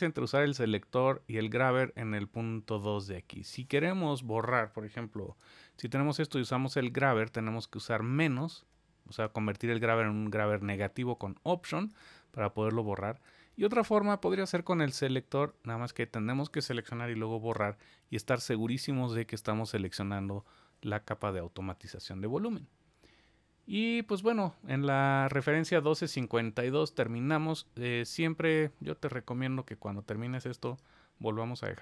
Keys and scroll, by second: 5.2 super+z, 13.0 super+z.